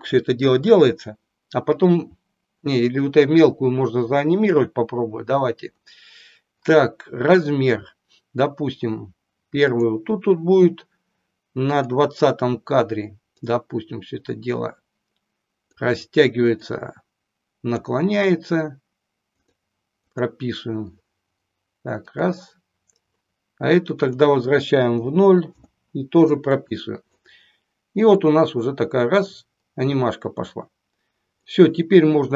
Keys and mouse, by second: 9.7 click, 11.7 click, 13.3-15.6 drag, 16.6-17.7 drag, 19.5 click, 20.1 click, 22.1 click, 24.1-25.8 drag, 26.6 click, 28.1-31.5 drag.